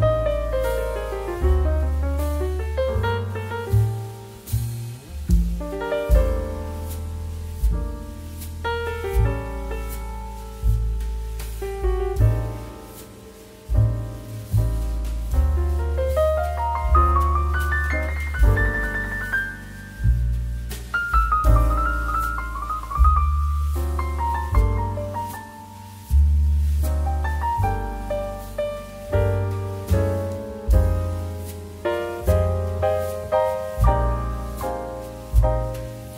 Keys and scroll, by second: 9.9 ctrl+d, 16.2 2, 20.9 Escape, 22.2 m.